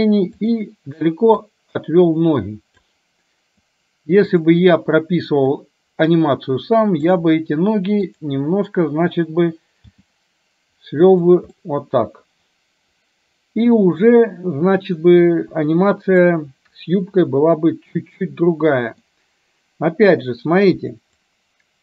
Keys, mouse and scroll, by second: 0.5 click, 1.6-2.9 drag, 4.4 click, 5.8-7.3 drag, 10.0 g, 11.7-14.1 middle drag, 15.5 KP_1, 16.4-19.0 middle drag, 21.4-21.8 drag.